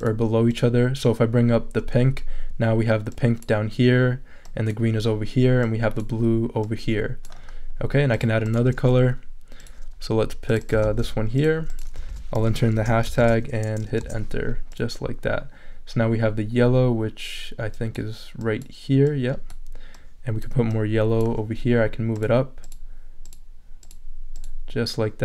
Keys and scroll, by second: 10.8 super+c, 12.1 super+a, 12.7 shift+super+3, 13.2 shift+super+v, 13.9 super+v, 14.0 super+Return.